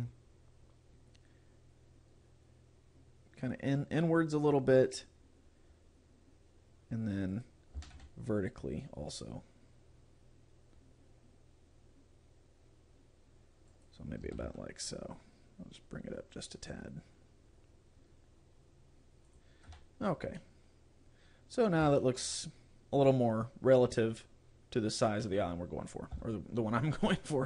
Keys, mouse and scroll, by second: 7.5 click, 9.0 s, 13.9 click, 15.4 g, 19.4 click, 19.9 Tab, 20.4 middle click, 21.7 scroll down 2, 22.0 shift+middle click, 22.4 middle click, 24.7-25.3 scroll up 3, 25.3 middle click, 26.1 KP_0, 27.1 a.